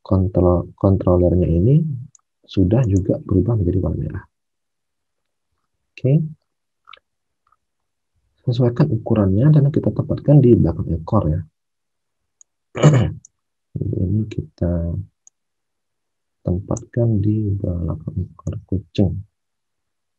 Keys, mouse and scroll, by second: 3.8 alt+Tab, 10.5 alt+Tab.